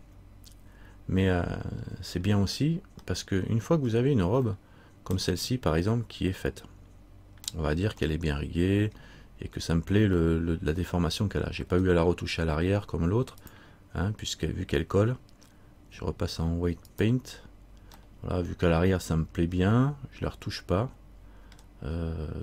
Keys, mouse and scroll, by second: 1.8-2.3 scroll down 1, 3.3 middle click, 4.0-4.6 scroll down 1, 4.7 middle click, 6.8 middle click, 8.3 middle click, 10.9 middle click, 13.6 click, 18.2 middle click, 21.2 middle click.